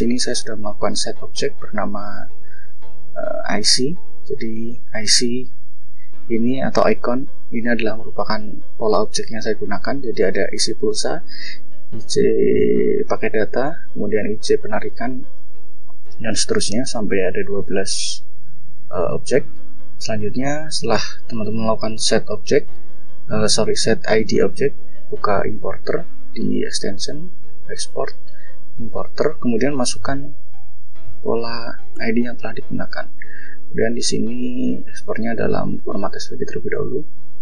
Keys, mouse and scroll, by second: 0.9 click, 2.6 click, 3.6 click, 5.1 click, 6.3 click, 7.3 click, 9.4 click, 10.7 click, 12.7 click, 13.3 click, 14.8 click, 21.6 click, 24.6 click, 25.4 click, 27.8 click, 29.2 click, 30.4-31.4 typing, 34.4 click, 35.3 click, 36.8 click.